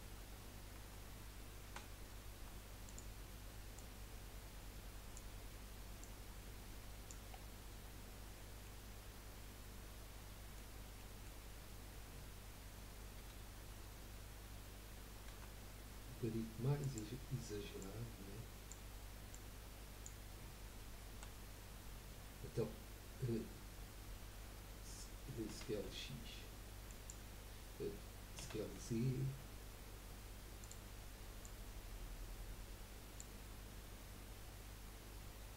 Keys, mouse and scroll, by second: 1.6 r, 3.7 click, 6.0 click, 7.3-7.7 scroll down 2, 8.6-13.2 middle drag, 13.2 KP_3, 15.4 r, 17.8 click, 19.3 click, 21.1 KP_1, 25.6 s, 28.6 s, 31.4 click.